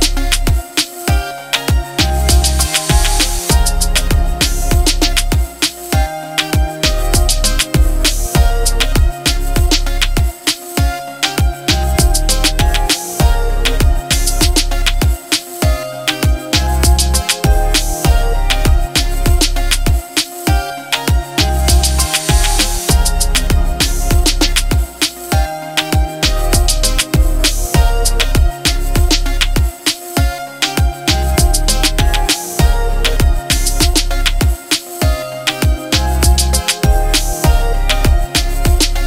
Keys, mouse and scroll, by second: 0.0-1.8 typing, 2.8 click, 3.7 ctrl+t, 5.7-7.5 alt+click, 9.3 click, 10.7 ctrl+t, 12.1-13.2 alt+click, 13.9 Return, 14.5 Up, 15.4 Left, 17.8 Left, 18.7 Up, 19.6 Down, 20.0 Up, 21.8-23.4 alt+drag, 23.3 click, 25.4-28.3 typing, 30.8 shift+h, 31.0 e, 32.8 click, 33.8 ctrl+t, 35.4-38.6 alt+drag, 36.8 alt+click.